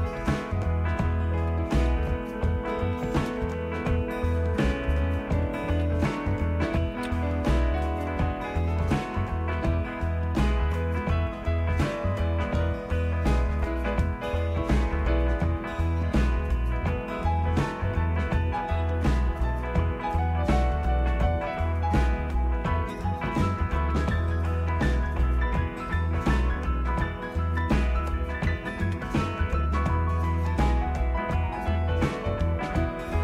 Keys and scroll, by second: 0.4 typing, 1.5-3.3 typing, 5.0-5.8 typing, 11.6 Tab, 18.6 BackSpace, 19.1 BackSpace, 19.3 BackSpace, 19.5 BackSpace, 22.6 typing, 28.7-29.4 typing.